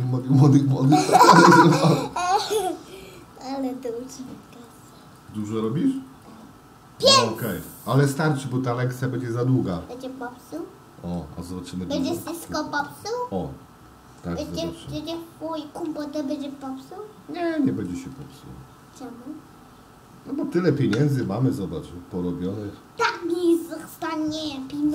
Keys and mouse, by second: 0.2 click, 0.6 click, 1.1 click, 1.4 click, 1.6 click, 1.8 click, 2.1 click, 2.4 click, 2.6 click, 3.3 click, 3.5 click, 3.8 click, 4.2 click, 4.4 click, 4.8 click, 5.1 click, 5.4 click, 5.6 click, 5.8 click, 6.2 click, 8.2 click, 10.6 middle click, 12.1 shift+middle click, 13.0-14.5 middle drag, 16.2-18.0 shift+middle drag, 21.0 ctrl+alt+KP_0.